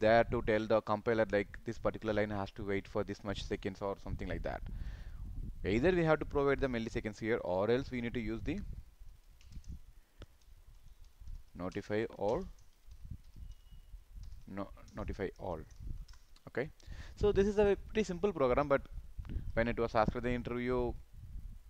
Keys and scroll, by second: 19.4 ctrl+s.